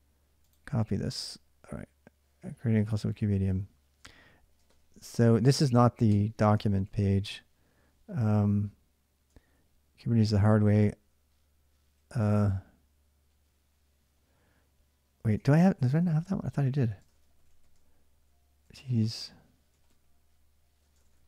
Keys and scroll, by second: 0.7 alt+Tab, 4.4-6.4 typing, 5.2 ctrl+[, 6.4 ctrl+[, 6.4 ctrl+j, 9.1 ctrl+[, 9.3-10.5 typing, 11.9 k, 12.0 k, 13.1 j, 13.8 j, 15.0-21.2 typing.